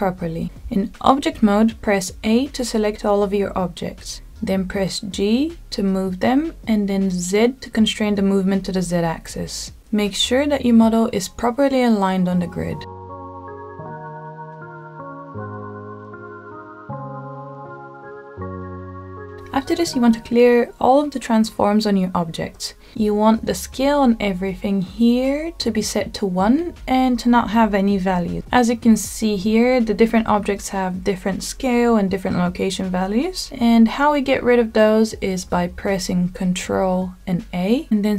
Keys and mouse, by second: 1.5 a, 3.6 g, 6.3 z, 10.3 KP_1, 11.8-12.3 shift+middle drag, 13.0 g, 13.4 z, 15.3 shift+middle click, 15.9 g, 16.6 z, 18.4 click, 19.0-21.2 shift+middle drag, 21.2 n, 21.6 n, 24.8 click, 35.3 a, 37.1 ctrl+a.